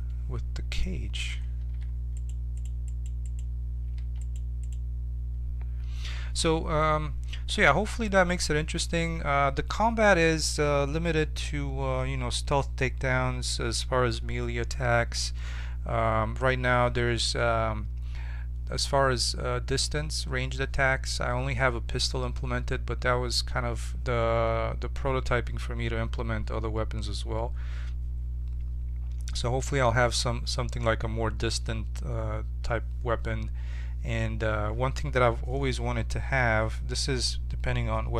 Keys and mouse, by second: 1.4 1, 2.1-6.6 right drag, 3.9 2.